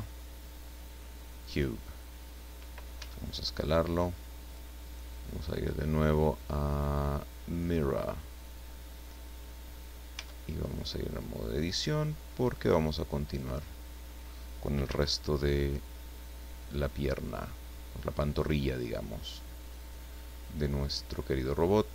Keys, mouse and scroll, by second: 1.4 click, 2.9 s, 4.5 click, 5.4 click, 7.6 click, 10.1 Tab, 10.7-13.5 drag, 14.8 s, 17.2 click, 18.3-20.1 drag, 21.7-21.9 drag.